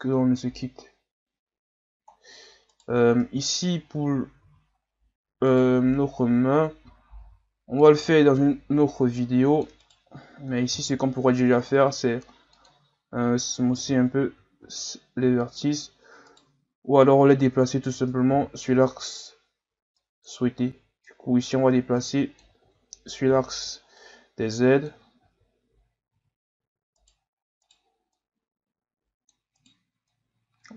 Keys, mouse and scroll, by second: 0.0 scroll up 4, 1.4-2.1 scroll up 1, 2.1 scroll down 2, 2.7 right click, 3.2 Tab, 4.5 z, 5.5 right click, 7.2 c, 10.7 w, 13.8 z, 14.6 ctrl+z, 16.2 right click, 18.3 z, 19.7 b, 21.1-22.6 drag, 22.6 ctrl+z, 23.3 o, 24.0-25.3 drag, 25.3 ctrl+z, 26.2 z, 27.0 right click, 27.6 right click, 28.2 click, 29.6 right click, 30.1-30.7 drag.